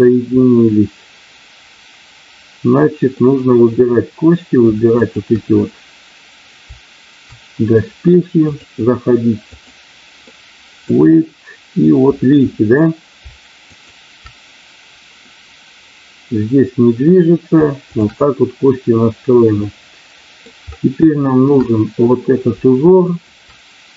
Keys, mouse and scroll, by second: 0.4-3.1 middle drag, 5.1 shift+click, 8.4-9.7 drag, 10.2 middle click, 13.7 shift+click, 17.9 shift+click, 19.5 middle click, 21.2 shift+middle click, 21.7 middle click, 23.0 shift+click.